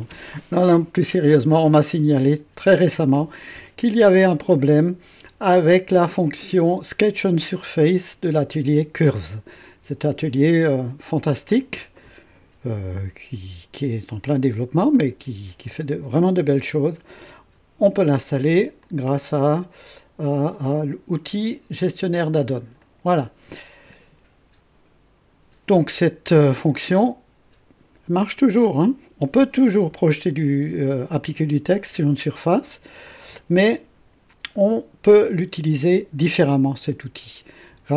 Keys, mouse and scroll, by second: 18.8 click, 22.8 click.